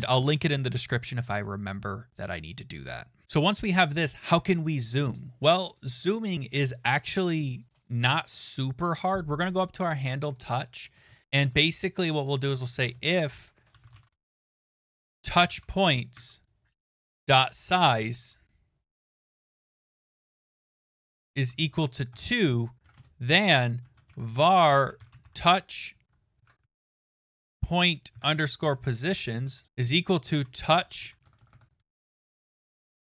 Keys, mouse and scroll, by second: 3.2 right click, 3.2 click, 6.4 click, 9.7 click, 10.4 click, 10.8 Return, 11.1 BackSpace, 11.4 Return, 12.5-15.6 typing, 16.2 Tab, 17.6-18.7 typing, 20.2-32.8 typing.